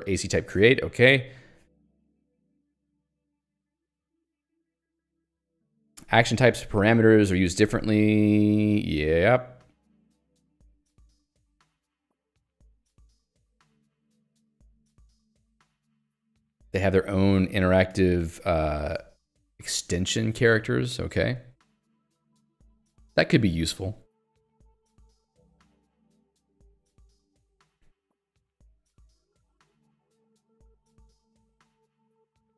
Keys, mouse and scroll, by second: 1.2 l, 3.3 j, 12.2 k, 15.1 j, 18.0 ctrl+d, 20.6 j, 22.4 k, 24.2 j, 29.2 k, 30.0 j.